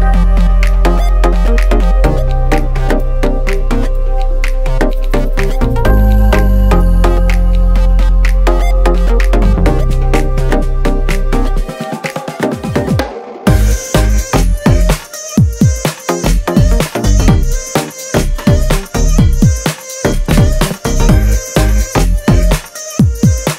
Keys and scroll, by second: 0.0-1.1 typing, 8.0 x, 8.8 x, 9.3 space, 10.1 a, 12.5 space, 14.8 space, 16.2 a, 18.8 x, 19.2 x, 19.5 space, 20.7 space, 22.6 x, 22.7 Return, 22.8 x, 23.0 Up, 23.1 space.